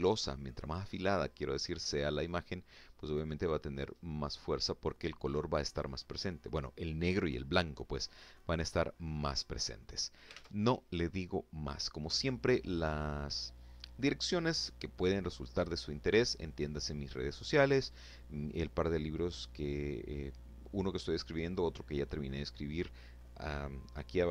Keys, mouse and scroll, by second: 2.7-3.0 scroll up 1, 7.6-8.6 scroll down 2, 8.6-9.0 scroll up 1, 9.3 alt+Tab.